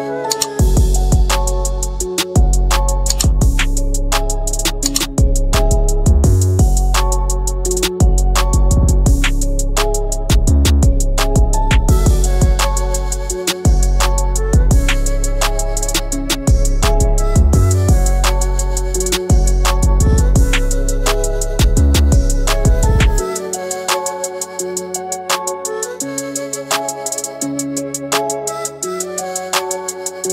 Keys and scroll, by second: 14.3 ctrl+r, 15.0 ctrl+alt+r.